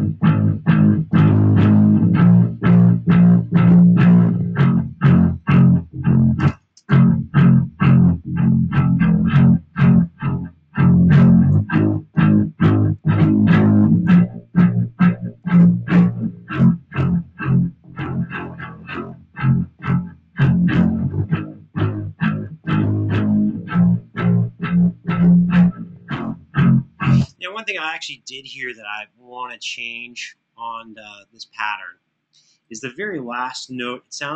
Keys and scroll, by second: 5.3 super+[, 6.2-6.5 typing, 11.3 super+d, 13.9 super+d, 26.9 space, 33.6 alt+f.